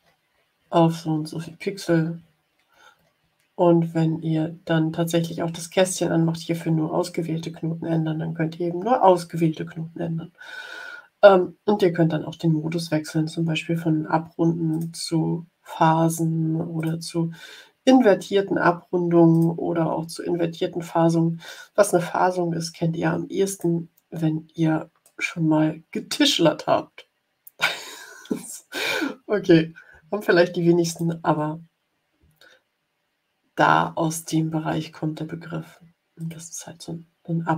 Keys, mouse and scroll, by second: 1.2 Up, 1.5 Up, 1.9 Up, 2.4 Up, 14.6 click, 16.7 click, 19.2 click, 23.4 click, 25.0 middle click, 25.4-26.5 drag, 30.8 click, 32.4-32.9 ctrl+scroll down 4, 36.1 click.